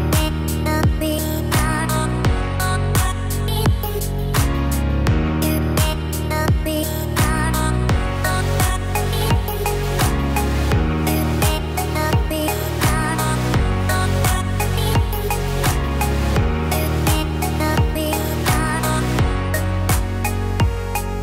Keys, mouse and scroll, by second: 2.2 KP_7, 4.5 e, 6.3 scroll up 4, 8.2 r, 10.6 e, 13.4 r, 15.8 e, 17.8 r, 19.4 e.